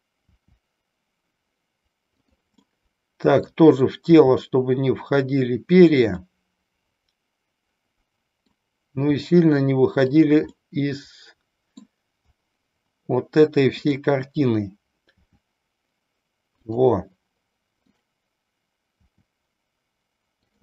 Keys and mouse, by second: 0.2 r, 2.3 click, 2.7 middle click, 4.2 r, 6.3-8.7 middle drag, 9.1 r, 10.7-11.8 middle drag, 13.8 click, 15.2 r, 16.8 click, 19.2 r.